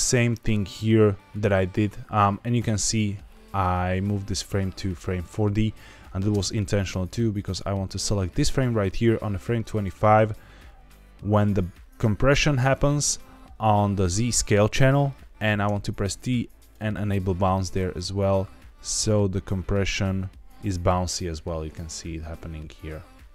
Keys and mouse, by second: 2.4 click, 6.3 space, 7.3 click, 9.8-11.8 drag, 15.6 t, 17.9-23.3 drag.